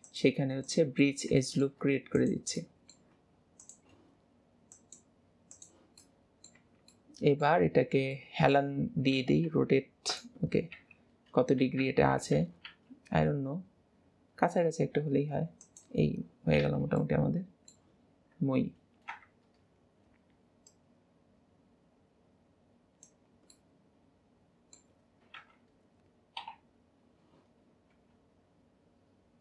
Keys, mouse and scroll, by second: 0.1 click, 1.0 middle click, 1.2 middle click, 2.2 click, 2.6-3.6 middle drag, 3.6 shift+click, 4.7-6.0 drag, 6.0 middle click, 6.6 Tab, 7.0 middle click, 7.8 scroll down 2, 8.2-9.2 shift+middle drag, 9.2 r, 10.8 KP_3, 11.8 alt+x, 12.7 r, 16.6 alt+z, 17.0-19.2 middle drag, 19.2 KP_1, 20.7 click, 23.6-25.4 middle drag, 25.4 KP_1, 27.9 r.